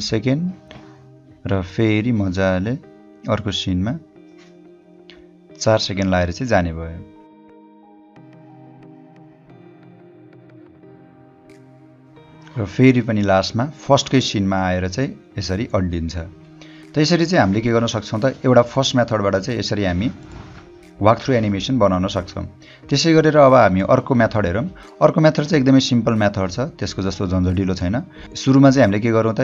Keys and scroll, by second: 22.5 o.